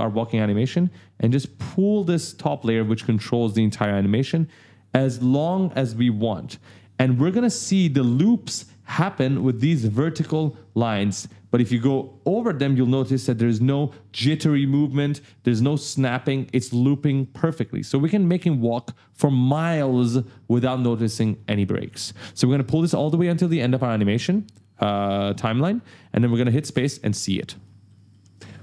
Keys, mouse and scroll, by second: 1.1 click, 5.0 click, 6.9 click, 11.1 click, 17.3-17.7 ctrl+scroll down 2, 18.0 right click, 20.8 click, 25.5 click, 26.5 space, 27.4 right click, 27.9-28.2 scroll down 2, 28.2 right click.